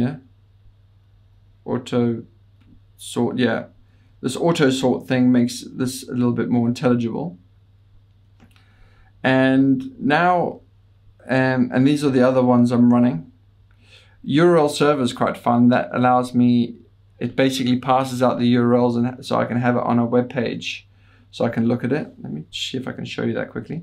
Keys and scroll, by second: 1.5-2.5 Down, 2.8 Down, 2.8 Up, 3.5 Up, 3.8 Up, 4.0 Up, 4.3 Down, 9.3 Page_Up, 9.6 Page_Up, 9.7 Page_Up, 10.0 Up, 10.2 Up, 10.4 Up.